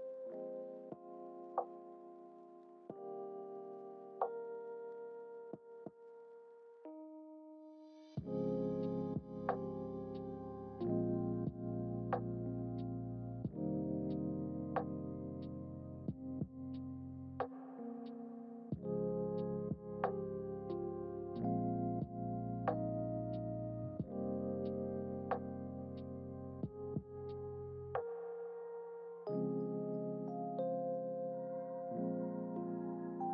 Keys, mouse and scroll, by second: 2.9-5.8 drag, 5.9 click, 7.1-10.0 drag, 11.7 scroll up 1, 11.8 scroll down 1, 13.2 KP_0, 16.5 scroll down 1, 18.3 scroll up 1, 18.8 scroll up 1, 21.6 n, 23.9-26.2 scroll up 10, 26.2-26.6 scroll down 1, 27.7 click, 29.3 n, 31.2-33.3 scroll down 11.